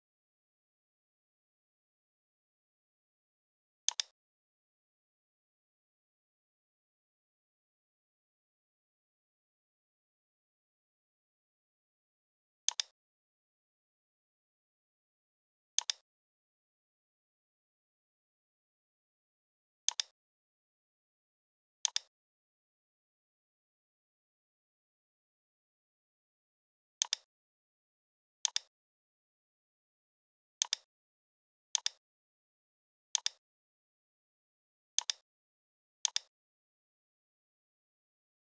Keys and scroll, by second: 1.5 v, 10.9 a, 25.6 v, 37.0 x, 38.0 /.